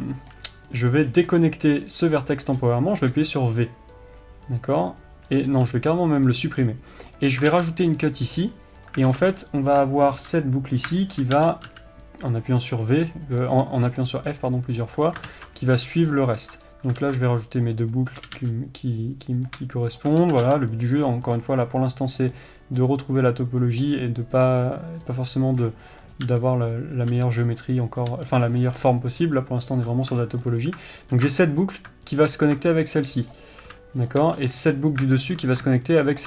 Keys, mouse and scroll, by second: 1.3 click, 2.9-3.2 scroll up 1, 3.5 v, 6.6 x, 6.9-7.3 scroll down 1, 7.5-9.4 middle drag, 7.9 ctrl+r, 9.4 alt+a, 9.7-10.2 scroll up 1, 10.2-11.2 shift+middle drag, 11.2 click, 11.5 shift+click, 11.8 f, 12.9-18.6 middle drag, 15.7 ctrl+z, 17.4 ctrl+r, 18.6 g, 19.3 right click, 19.8 click, 20.3 shift+click, 20.6 f, 21.5-22.5 middle drag, 22.5 click, 22.7-26.5 middle drag, 26.5 click, 26.6 g, 27.1 click, 27.5 g, 28.4 click, 28.5 g, 29.1 scroll down 1, 29.3-31.5 middle drag, 30.2 scroll up 1, 30.9-31.5 scroll down 1, 31.5 ctrl+alt+click, 31.8 middle click, 32.8 ctrl+alt+click, 33.1-33.7 scroll up 1, 33.7 click, 34.6 g, 35.3 click, 35.6 ctrl+alt+click.